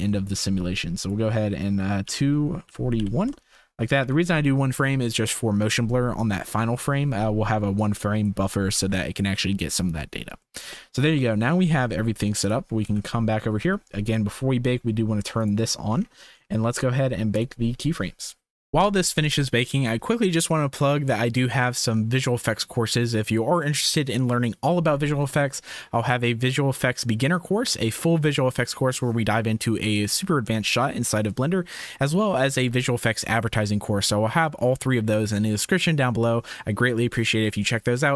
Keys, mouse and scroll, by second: 1.0-3.2 drag, 4.0 ctrl+s, 7.8 click, 8.7 ctrl+s, 10.5 shift+click, 12.5 drag, 12.8 ctrl+s, 15.3 click, 17.3-35.4 drag, 36.7-38.1 middle drag.